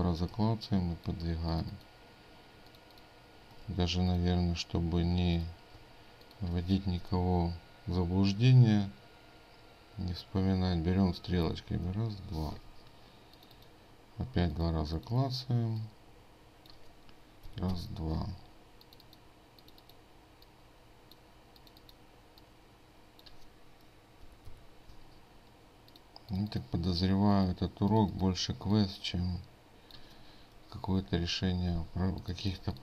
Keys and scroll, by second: 3.7 ctrl+z, 32.6 ctrl+space.